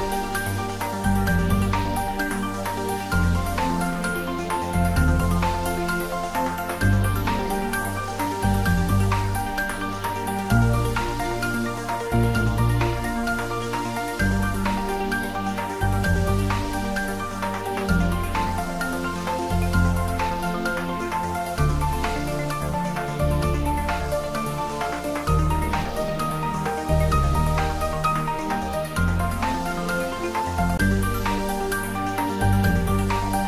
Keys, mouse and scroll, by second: 2.7 ctrl+z, 5.0 space, 8.1 space, 10.2 ., 11.1 Tab, 13.2 s, 17.7 s, 18.3 click, 18.6 g, 24.1 click, 25.3 scroll down 1, 26.5-29.0 middle drag, 29.0 click, 30.3-31.4 scroll up 1.